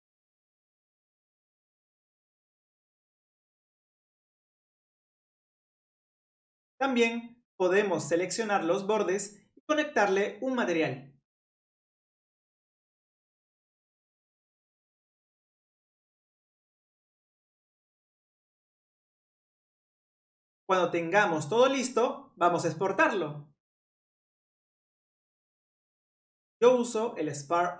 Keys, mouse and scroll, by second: 0.2 scroll down 1, 0.4-1.6 middle drag, 1.6-3.5 drag, 3.9 click, 4.1 middle click, 5.0 click, 5.2 scroll up 1, 5.2 middle click, 5.7-6.2 scroll down 1, 6.2 click, 6.6 ctrl+click, 10.0 ctrl+click, 10.8 middle click, 11.3 click, 11.5 click, 11.6 shift+click, 11.9 shift+click, 12.1 middle click, 12.5-12.9 scroll up 1, 12.9 shift+click, 13.0 middle click, 13.4 shift+click, 13.5 scroll up 1, 13.5 middle click, 14.0 scroll down 1, 14.2 shift+click, 14.4 shift+click, 14.6 shift+click, 14.8 shift+click, 14.9 middle click, 15.3 shift+click, 15.5 middle click, 15.9 shift+click, 16.0 shift+click, 16.1 shift+click, 16.3 middle click, 17.0-18.7 drag, 21.4 middle click, 22.1 click.